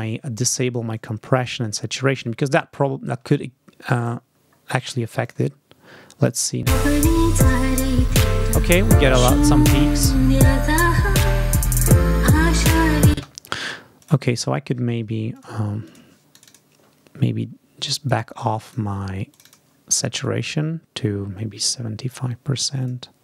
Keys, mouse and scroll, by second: 0.8 click, 1.3 click, 2.0 click, 2.6 ctrl+scroll down 2, 3.9 click, 4.4-5.4 scroll up 4, 5.1 click, 6.5 space, 7.7 ctrl+scroll down 2, 9.7-10.0 ctrl+scroll up 2, 10.7 scroll down 2, 13.0 space, 13.9 click, 15.2 click, 15.7 click, 16.2 click, 17.7 click, 18.5 click, 19.2 click, 20.1-23.0 drag.